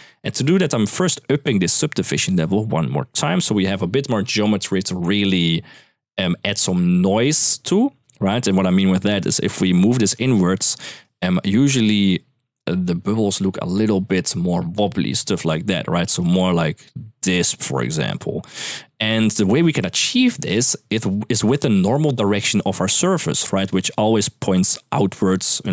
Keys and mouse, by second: 1.9 click, 8.6 shift+middle click, 9.1 shift+middle drag, 9.5 middle click, 10.2 shift+middle click, 15.8-17.8 d, 16.0 click, 23.5-25.7 d, 24.3 click.